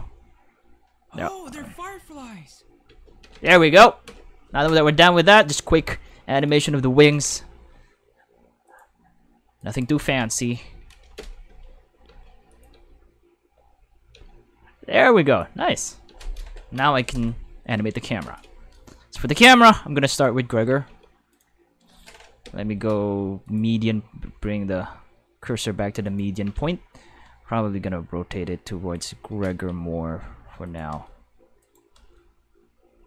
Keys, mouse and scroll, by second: 2.8 space, 3.0 5, 4.1 Home, 4.1 5, 8.6 click, 9.6 right click, 11.1-12.8 typing, 12.5 click, 14.1 space, 14.3 5, 15.3 click, 15.6 space, 16.1 space, 16.2 5, 19.4-21.3 typing, 21.3 right click, 22.4 5, 23.5 click, 24.1 g, 26.0 right click, 26.1-27.1 typing, 28.9 click, 29.1-30.8 typing, 30.6 click, 31.9 g.